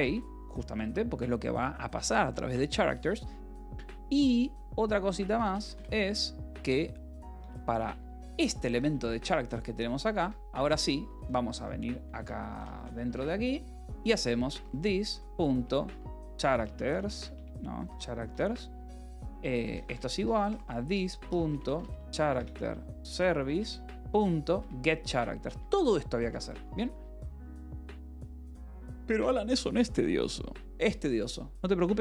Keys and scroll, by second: 0.0-1.2 typing, 5.5 =, 5.7 space, 7.3-10.9 typing, 7.9 Escape, 12.0-16.5 typing, 12.0 Escape, 13.0 Return, 17.7 s, 18.7-22.2 typing, 23.5 Return, 23.9 ., 24.5 Return, 24.9 Escape, 25.0-28.7 typing, 27.2 Escape.